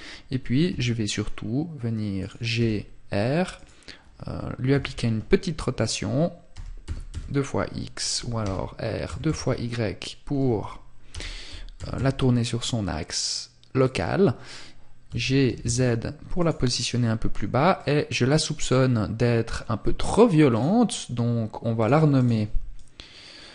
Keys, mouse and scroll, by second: 1.4 click, 1.8 r, 2.8 click, 3.9 KP_3, 13.1 click, 14.2 g, 15.6 click, 15.9 middle click, 19.7 click.